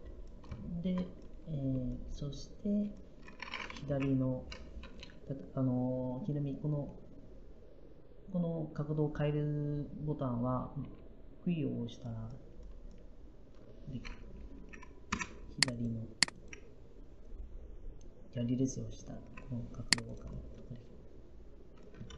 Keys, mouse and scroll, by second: 3.7 Left, 10.7 q, 15.0 Left.